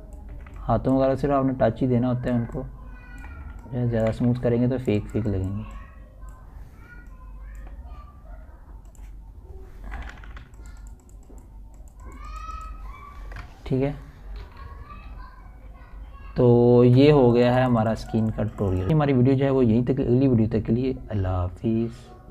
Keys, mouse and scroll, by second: 0.0-1.4 typing, 0.5 click, 0.5 click, 1.5-3.0 drag, 3.0 [, 3.2 click, 3.7 ], 3.8-6.8 drag, 6.8 [, 7.0-11.6 drag, 12.6-13.0 typing, 13.2 click, 16.1 ctrl+alt+scroll down 1, 17.1 ctrl+alt+z, 18.3 ctrl+alt+scroll up 1, 18.8 ctrl+alt+scroll down 1.